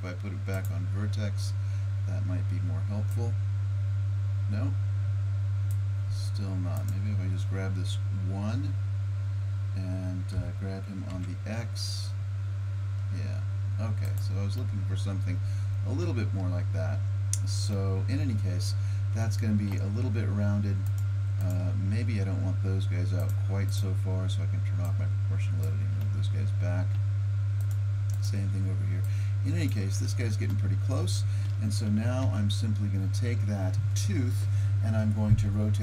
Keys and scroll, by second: 10.4 g, 32.3 Tab.